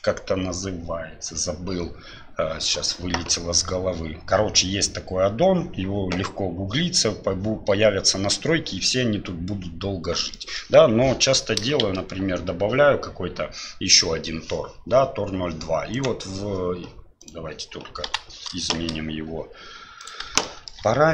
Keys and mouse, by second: 10.5 middle click, 15.9 click, 17.2-18.0 drag, 18.5 shift+Delete, 18.7 shift+a, 20.5 shift+middle click.